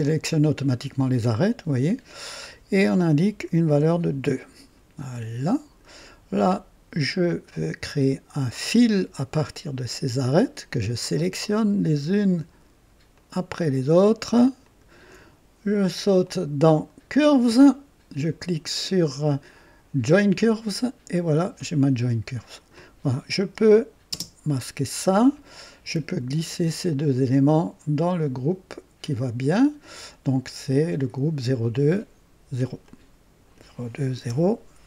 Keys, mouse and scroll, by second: 1.8 click, 3.2 KP_2, 3.3 KP_2, 3.6 KP_Enter, 5.1-6.0 drag, 7.0 click, 8.6 ctrl+click, 10.6 ctrl+click, 13.1 ctrl+click, 14.6 ctrl+click, 17.2 click, 20.1 click, 22.5 click, 24.0 space, 24.2 space, 26.4 ctrl+click, 27.1-28.5 ctrl+drag, 32.8-33.7 drag, 34.2 KP_0.